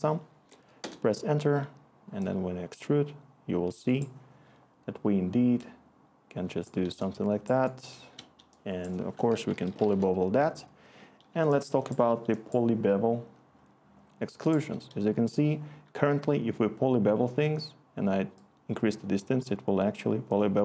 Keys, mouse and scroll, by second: 0.8 Return, 6.8-8.1 click, 7.3 click, 7.4 click, 9.0-10.2 typing, 9.0 click, 11.3 click, 11.8 click, 14.7 click.